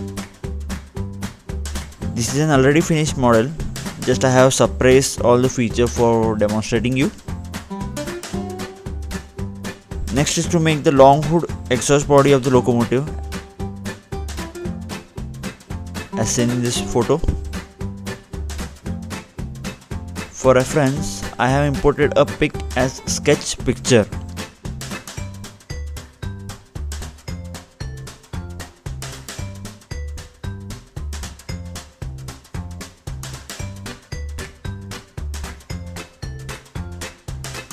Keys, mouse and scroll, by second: 0.2-0.9 scroll down 2, 0.9 middle click, 5.4-7.0 scroll down 2, 7.5 ctrl+Tab, 9.6 click, 10.0-10.3 scroll up 1, 10.3-10.8 scroll down 2, 11.3 middle click, 11.4-11.8 scroll down 2, 12.4 middle click, 13.9 scroll down 1, 14.4 click, 14.8 ctrl+Tab, 18.3-18.7 scroll down 2, 18.9-19.6 scroll up 2, 20.2 ctrl+8, 21.3 click, 21.4 ctrl+8, 22.3 scroll up 1, 22.5-23.2 scroll down 1, 23.2-23.7 scroll down 1, 33.1 click, 36.6-37.0 scroll up 1, 37.0 scroll down 1.